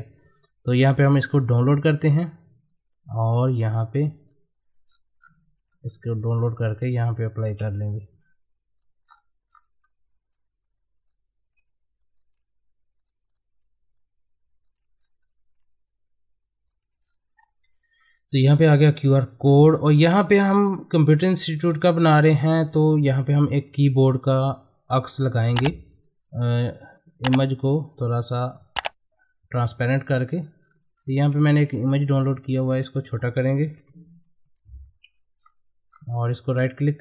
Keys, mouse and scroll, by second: 1.0-4.8 drag, 4.8 scroll down 1, 5.7 middle click, 6.7-9.0 shift+drag, 9.0 scroll up 1, 9.9-12.0 drag, 15.0 scroll up 1, 15.3-17.0 drag, 17.0-17.5 scroll down 1, 17.7 Left, 18.1-18.5 scroll down 1, 18.5 click, 18.8 middle click, 19.5 scroll up 1, 25.9-30.6 drag, 30.6 scroll down 1, 32.6 click, 33.8 Tab, 35.4-36.2 scroll up 1, 36.2 right click.